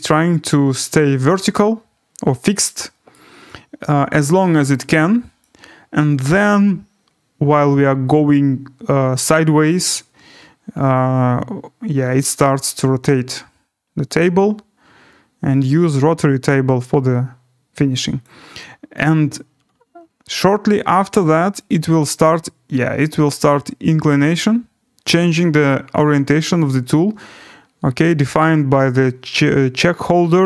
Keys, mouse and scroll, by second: 3.2 right click, 4.6 right click, 18.2 click, 18.9 right click, 19.2 middle click.